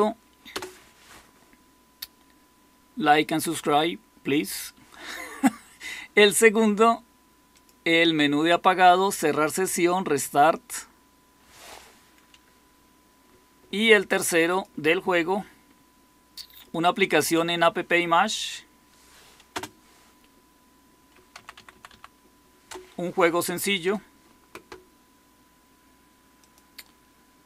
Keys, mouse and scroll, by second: 0.4 Return, 12.2 Escape, 19.5 space, 21.3 Down, 21.5 Down, 21.7 Down, 21.8 Down, 22.6 Return.